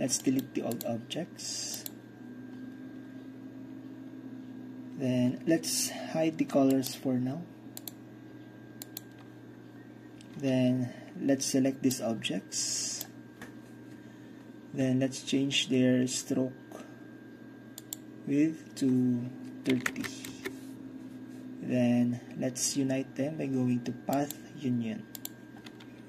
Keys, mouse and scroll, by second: 0.8 click, 1.9 click, 6.8-10.1 drag, 12.0-13.1 drag, 13.1-13.9 middle drag, 17.9 click, 18.6-19.6 middle drag, 19.8 KP_3, 20.0 KP_0, 20.3 Return, 24.2-26.0 drag.